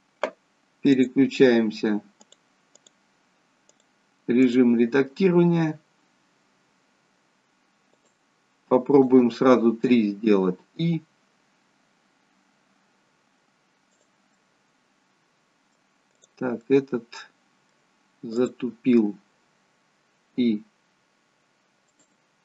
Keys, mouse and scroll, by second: 5.4-6.2 scroll down 1, 7.9 shift+click, 10.9 shift+click, 10.9 i, 14.4 middle click, 16.1 click, 16.6 middle click, 18.3 click, 20.3 i.